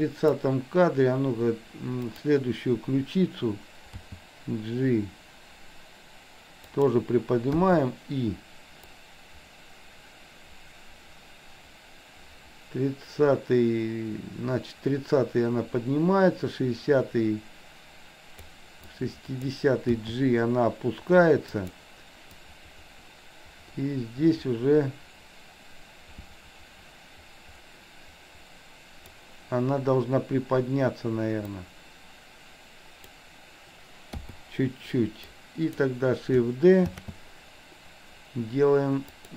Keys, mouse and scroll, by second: 2.0 click, 4.0 g, 7.6 i, 9.0-18.7 drag, 19.1-19.6 drag, 20.0 g, 22.3-29.2 drag, 31.6-33.1 drag, 34.2 i, 35.2 click, 37.0 shift+d.